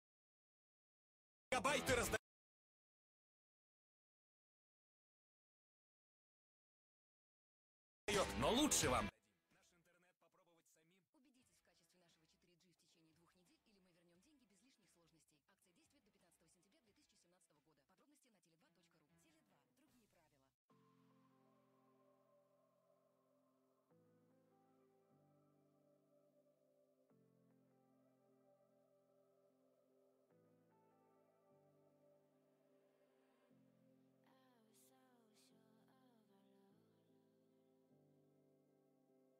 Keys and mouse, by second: 0.6 r, 1.6 g, 4.3 z, 6.4 z, 8.4 ctrl+e, 13.5 z, 14.0 a, 15.2 c, 17.6 z, 18.5 g, 20.9 z, 21.0 a, 21.7 c, 23.2 z, 23.9 g, 25.5 g, 27.0-28.1 drag, 27.5 Tab, 31.4 Tab, 32.9 ctrl+r, 35.9 ctrl+r.